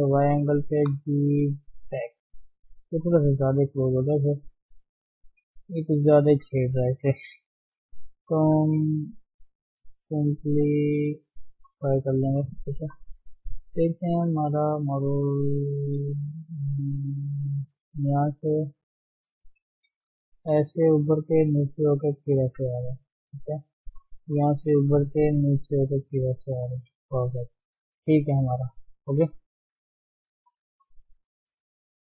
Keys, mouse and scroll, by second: 0.8 g, 2.6 click, 2.9 alt+shift+click, 3.8 g, 5.5 click, 5.9 alt+shift+click, 6.9 g, 8.7 click, 9.1 alt+shift+click, 9.8 g, 11.2 Tab, 11.4 scroll down 2, 11.6-12.8 middle drag, 12.8-13.8 scroll up 5, 12.9 KP_3, 13.8 shift+z, 14.4-14.9 scroll up 1, 14.9-16.0 shift+middle drag, 16.0 shift+z, 16.5 shift+middle click, 17.4-18.2 scroll down 3, 18.2 shift+z, 18.5-20.0 shift+middle drag, 20.0-22.7 drag, 22.7 shift+z, 22.9-24.4 shift+middle drag, 24.4-26.8 drag, 26.8 d, 27.0-27.4 scroll down 2, 27.6-28.0 scroll up 2, 28.0-29.0 right drag, 29.0 d, 29.1 scroll down 2, 29.2 middle click, 30.1 middle click, 30.4-30.7 scroll up 1, 30.7 Tab, 30.9-32.0 middle drag.